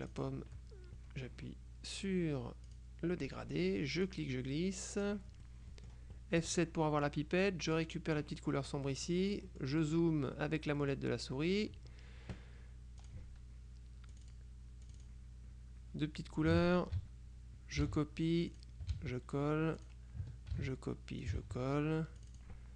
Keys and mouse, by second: 0.2 click, 2.8 click, 4.1-5.6 drag, 6.5 F7, 7.9 click, 8.9 click, 9.9 click, 10.9 click, 13.1 click, 14.2-15.7 drag, 16.6 click, 17.9 ctrl+c, 18.6 click, 19.0 ctrl+v, 19.9 click, 20.6 ctrl+c, 21.3 ctrl+click, 21.5 ctrl+v, 22.3 click.